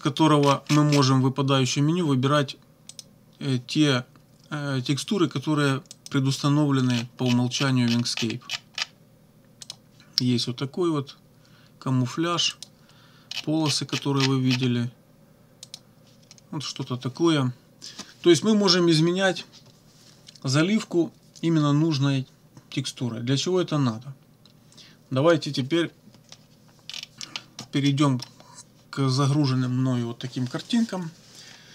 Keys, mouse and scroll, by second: 0.4-1.2 scroll down 1, 2.9 click, 6.0 click, 6.9-7.2 scroll down 1, 7.6 scroll down 1, 9.6 click, 12.5 click, 13.3-14.3 scroll down 2, 14.3 scroll down 1, 15.6 click, 26.8-27.5 scroll down 4, 27.8 middle click.